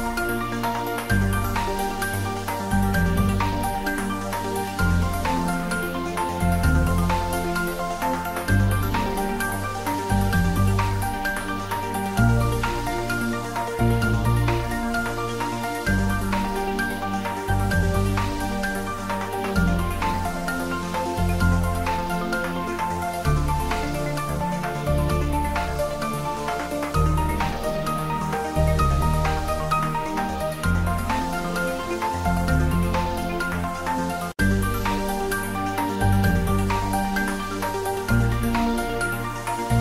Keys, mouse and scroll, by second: 0.6-2.0 middle drag, 2.8 Tab, 3.3 s, 4.3 click, 4.5 ctrl+z, 6.3 s, 7.4 click, 7.6 middle click, 8.5 e, 10.3 click, 10.6 Tab, 12.4 g, 13.9 click, 14.3 Tab, 14.5-16.0 middle drag, 16.0 ctrl+middle click, 16.5 Tab, 17.6 Up, 18.3 Return, 18.4 Tab, 19.0 ctrl+middle click, 19.4 Tab, 20.4 ctrl+3, 20.7-22.1 middle drag, 22.1 ctrl+middle click, 22.7 Tab, 23.2 click, 23.9 2, 24.2 click, 25.7 middle click, 26.2 middle click, 27.0 ctrl+b, 29.6 click, 29.7 Tab, 30.2 middle click, 30.6 ctrl+middle click, 31.3 ctrl+z, 32.2 Tab, 32.7 ctrl+a, 33.0 click, 33.7 shift+middle click, 34.0 Tab, 34.7 ctrl+b, 37.2 click, 37.4 Tab, 38.3 shift+middle click, 38.9 ctrl+middle click.